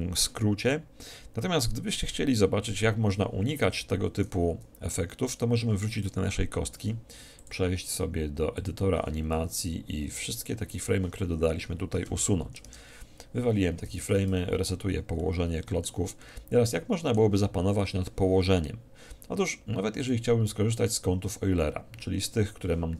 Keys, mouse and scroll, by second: 3.7 2, 4.3 3, 5.0-6.0 middle drag, 7.5-9.2 drag, 9.4 a, 9.5 a, 10.0 a, 12.6 Delete, 13.9 alt+r, 15.1-17.9 middle drag, 19.9-21.8 drag.